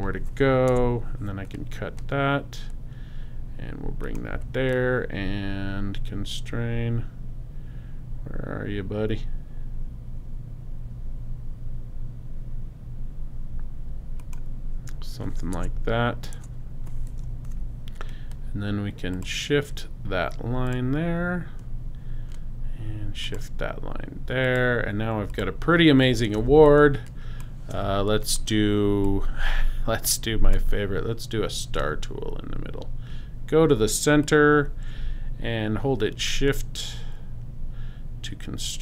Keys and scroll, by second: 0.7 super+BackSpace, 1.3 BackSpace, 15.6 BackSpace, 17.5 p, 26.3 super+space, 27.1 space.